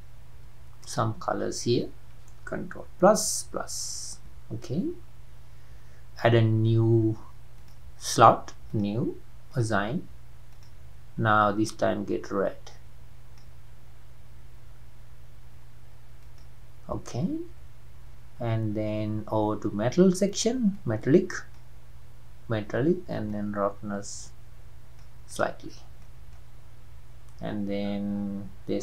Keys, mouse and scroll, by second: 1.0 alt+click, 3.0 ctrl+KP_Add, 3.5 ctrl+KP_Add, 7.8-11.7 drag, 18.5-20.9 scroll down 3, 20.9-25.4 drag, 25.6-26.0 scroll down 4, 26.0-28.8 middle drag.